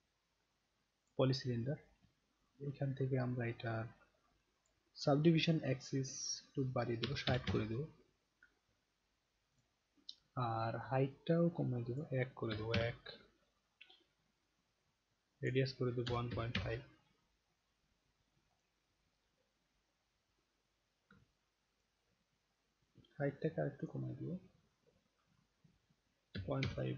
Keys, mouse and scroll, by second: 1.0 click, 4.7 click, 9.6 click, 11.9 click, 15.4 click, 18.5 click, 20.7 middle click, 21.3-21.8 alt+drag, 22.3-22.9 alt+scroll up 1, 22.9 alt+scroll up 1, 23.8 click.